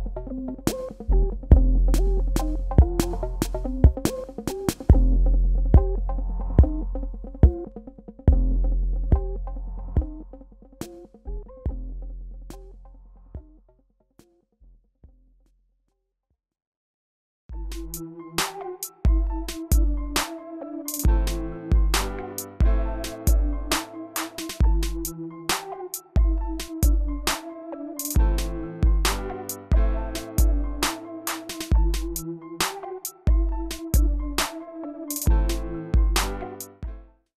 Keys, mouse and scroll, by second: 1.6 click, 3.2 ctrl+click, 5.8 ctrl+click.